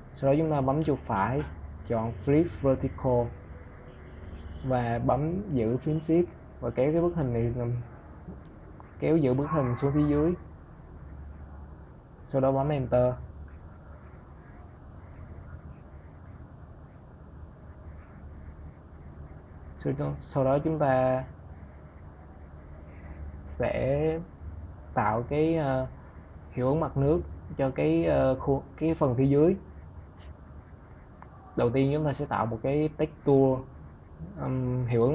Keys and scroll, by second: 11.5 Return.